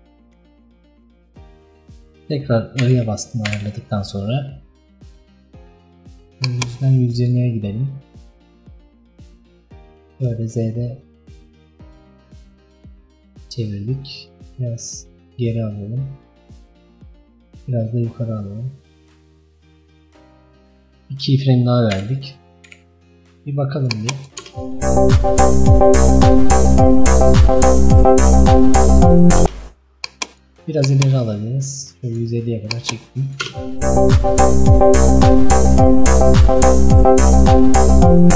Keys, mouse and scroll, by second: 2.5 i, 3.4 i, 6.5-15.1 drag, 15.6-22.0 drag, 22.0 i, 24.0 click, 24.5 space, 30.7-33.5 drag, 33.5 space.